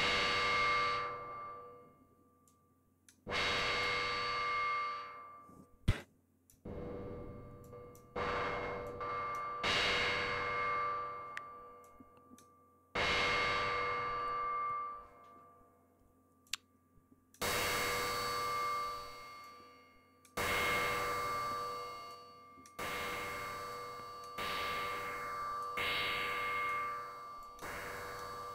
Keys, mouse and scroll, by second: 2.3-3.1 drag, 3.4-3.9 drag, 5.8 click, 7.5 click, 8.7 click, 11.7 click, 16.3 click, 19.3 click, 22.0 click, 23.6 click, 24.8 click, 26.1 click, 27.3 click, 27.8 click.